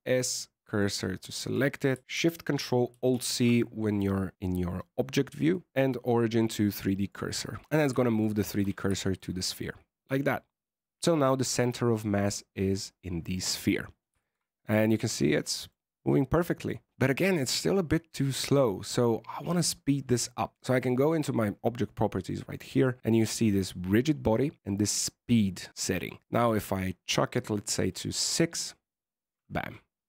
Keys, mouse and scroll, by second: 1.3 Tab, 2.8 ctrl+alt+shift+c, 7.6 scroll down 6, 7.9 shift+middle click, 8.4 alt+a, 8.9 shift+middle click, 9.1 scroll down 1, 9.3-10.9 scroll up 1, 10.9 scroll up 2, 14.1 shift+middle click, 14.3 middle click, 15.0 a, 15.3 middle click, 19.4 click, 21.1 click, 22.3 click, 26.0 click.